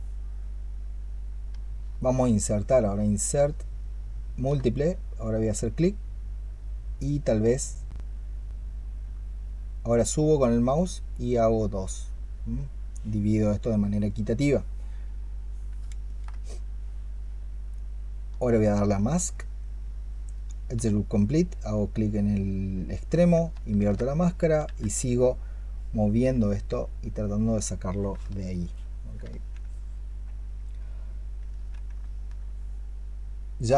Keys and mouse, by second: 1.7-4.3 space, 15.9 ctrl+click, 18.3-20.6 space, 23.6 ctrl+click, 24.5 w, 28.2 alt+click, 31.9 alt+click.